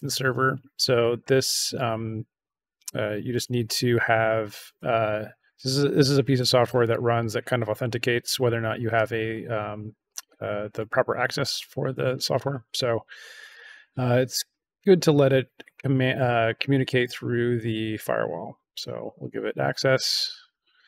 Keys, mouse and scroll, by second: 5.5 click, 6.3 click, 13.5 click, 15.9 click, 18.3 click, 20.1 click.